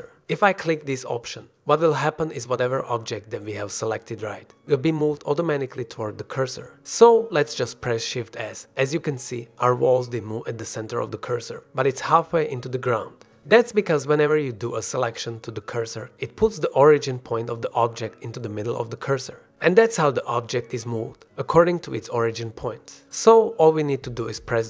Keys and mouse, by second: 8.5-9.1 middle drag, 9.3 shift+s, 12.7-13.2 middle drag, 13.5 middle drag, 14.9-15.3 middle drag, 15.6 g, 16.2 click, 16.9-18.9 drag, 19.1-19.4 drag, 20.4 drag, 21.5 shift+s, 23.2 drag.